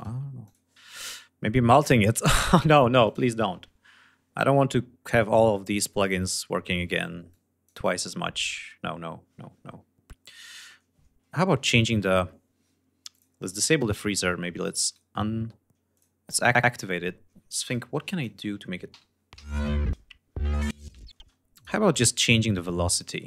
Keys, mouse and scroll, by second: 0.0 click, 2.6 click, 4.2-4.9 scroll down 2, 6.8-7.4 drag, 12.7 click, 14.4 right click, 15.5 click, 17.1 g, 17.2-17.9 drag, 18.8 l, 20.6 space, 21.0 click, 21.4 click, 21.8 click, 22.6 right click.